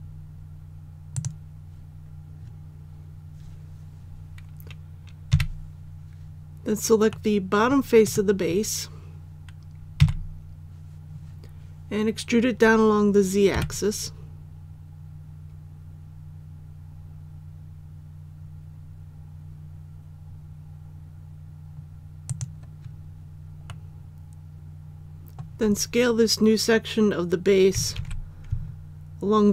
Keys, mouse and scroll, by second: 1.1 click, 5.3 KP_1, 7.1 middle click, 8.0 right click, 10.0 KP_1, 13.5 e, 22.2 click, 23.7-25.7 middle drag, 27.9 alt+a.